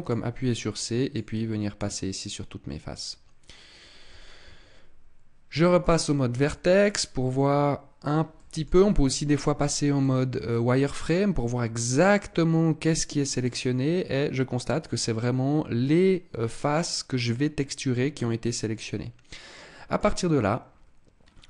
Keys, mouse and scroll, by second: 5.6 click, 6.3 middle click, 8.2 middle click, 8.6 z, 9.8 middle click, 13.3 middle click, 20.1-21.1 scroll down 4, 21.1-21.4 scroll up 3.